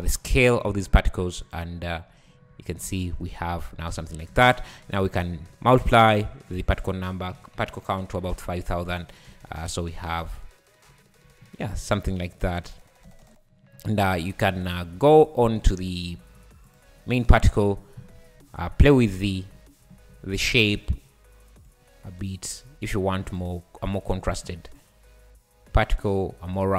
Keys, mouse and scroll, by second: 0.1 `, 1.5 click, 1.9 `, 2.4 scroll up 3, 2.8 space, 3.5 scroll down 3, 4.3 space, 4.6-6.0 scroll up 19, 6.5-7.9 drag, 9.3 space, 10.9 `, 11.4-11.8 scroll up 4, 11.8 `, 12.2 `, 13.1 space, 13.7 scroll down 5, 14.6 click, 15.1-15.5 scroll down 7, 15.5 `, 15.9 scroll down 4, 16.1 `, 16.7 click, 17.1 `, 17.7-18.1 scroll up 10, 18.4 `, 19.5 `, 19.9 scroll up 2, 20.1 `, 21.7-26.7 drag.